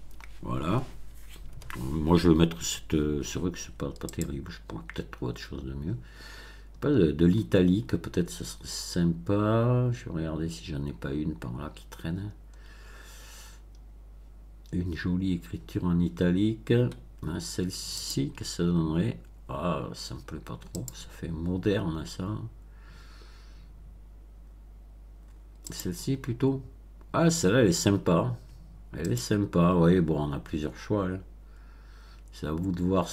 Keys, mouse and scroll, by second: 4.0 click, 4.8-6.5 scroll down 8, 8.1-9.0 scroll down 4, 9.7 scroll down 2, 11.0 scroll down 2, 11.6-13.8 scroll down 10, 14.0-15.0 scroll down 4, 15.5-16.2 scroll down 4, 17.9 click, 20.7 click, 21.6-21.9 scroll down 1, 22.2 scroll down 1, 22.8-23.2 scroll down 1, 24.1-24.5 scroll down 1, 24.5-25.6 middle drag, 25.6 click, 29.0 click, 29.9 scroll down 1, 30.5 scroll down 1, 32.0 scroll down 1, 32.9-33.1 scroll down 1.